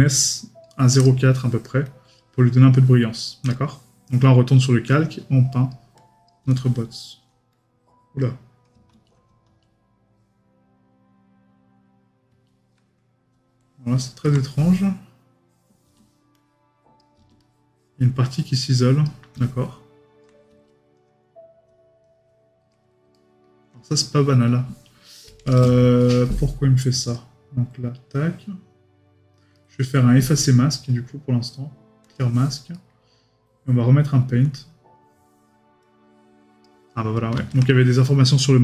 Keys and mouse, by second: 23.1 right click, 29.5 right click, 32.7 right click.